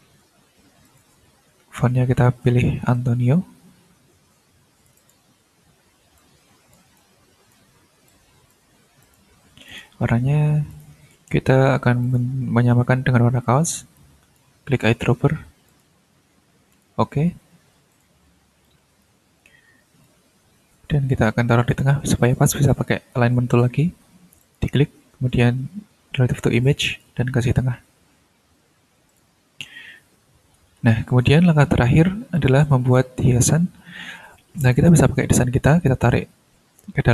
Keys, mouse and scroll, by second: 0.8 ctrl+click, 1.1 ctrl+a, 2.3 a, 2.9 n, 4.9 click, 6.1 click, 6.9 click, 8.0 click, 9.0 click, 9.6 click, 10.7 click, 11.2 ctrl+a, 12.0 click, 13.9 click, 15.6 click, 16.7 click, 17.9 click, 18.6-20.2 drag, 21.7 click, 24.4 click, 26.8 click, 29.0 ctrl+click, 29.5 ctrl+scroll down 2, 30.2 ctrl+scroll up 2, 30.8 ctrl+scroll down 2, 32.3 click, 32.8 click, 34.6 click, 35.8-37.1 drag.